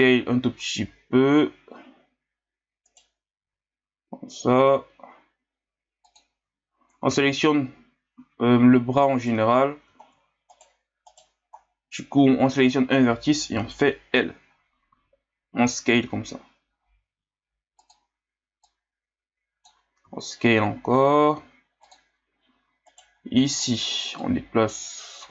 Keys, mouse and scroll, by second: 3.4 s, 7.0 a, 7.2 a, 8.2 s, 9.6 scroll down 2, 10.5 right click, 11.1 right click, 11.6-12.6 scroll up 1, 12.6 right click, 13.5 l, 14.9 s, 18.6-20.1 drag, 20.1 s, 22.9 right click, 23.3 b, 24.2-25.3 drag.